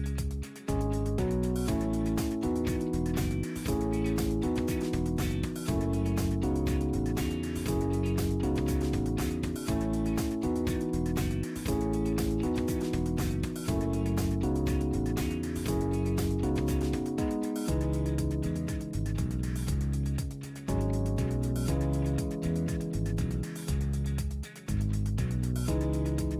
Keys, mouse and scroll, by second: 1.6 click, 2.7 click, 3.6 KP_1, 3.7 KP_0, 4.1 KP_Enter, 6.8-7.7 drag, 8.4 click, 9.7 click, 10.8 KP_2, 11.1 KP_Enter, 13.0-14.1 drag, 14.3-14.9 scroll down 2, 16.1 click, 18.2 click, 19.3 KP_3, 19.6 KP_8, 20.1 KP_Enter, 20.8 scroll down 2, 21.4-21.8 scroll down 2, 22.1 scroll up 2, 22.8 scroll down 1, 24.5 click, 26.1-26.3 middle drag.